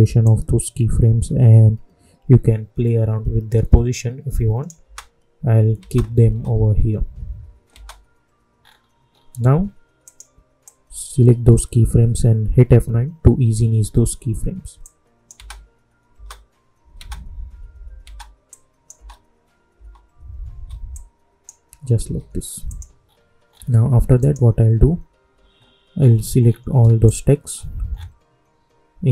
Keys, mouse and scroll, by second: 4.8 space, 8.5 scroll up 1, 10.0-12.6 drag, 12.6 F9, 14.7 click, 15.3 space, 18.4 click, 18.9 space, 20.9 click, 22.0 j, 22.6 click, 23.0 scroll up 1, 24.1 click, 25.9 scroll down 1, 27.0 shift+click, 27.4 scroll up 1, 29.0 click.